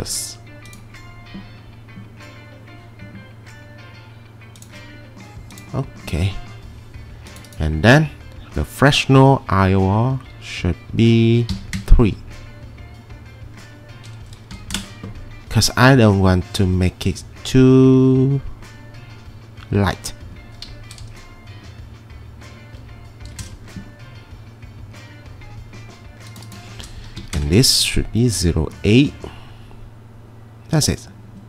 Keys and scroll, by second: 11.6 3, 11.8 Return, 14.5 9, 14.7 Return, 23.3 3, 23.4 Return, 26.8-27.7 typing.